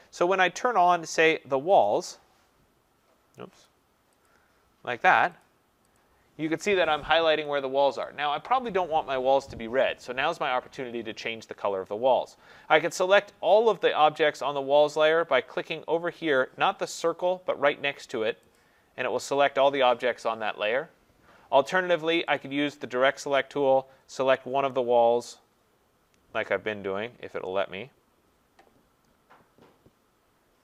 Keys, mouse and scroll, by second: 1.8 click, 3.6 click, 4.2 click, 5.4 click, 5.9 click, 7.4 click, 8.0 click, 18.6 click, 22.4 click.